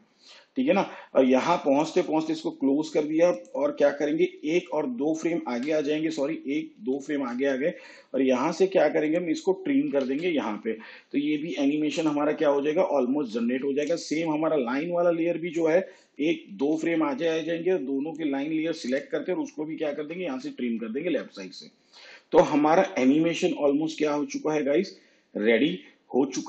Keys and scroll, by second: 4.4 alt+Left, 6.4 ctrl+Left, 10.0 alt+], 16.1 ctrl+Left, 20.0 alt+].